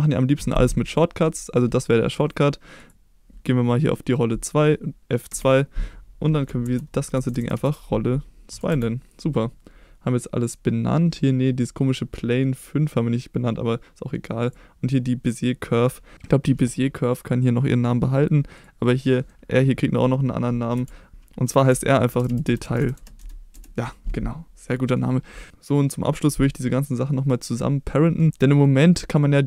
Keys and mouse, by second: 2.8 click, 5.3 F2, 7.4 l, 18.6 click, 19.1 middle click, 20.7 F2, 21.1 BackSpace, 24.8 middle drag, 28.4 middle drag, 29.1-29.4 drag.